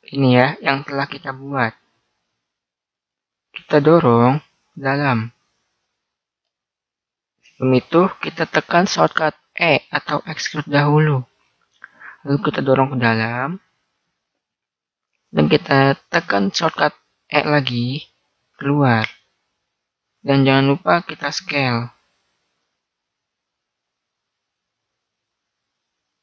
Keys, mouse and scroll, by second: 2.7-4.1 middle drag, 4.1 click, 6.4 ctrl+z, 11.1 e, 18.1 e, 21.3 s, 24.2-26.2 middle drag.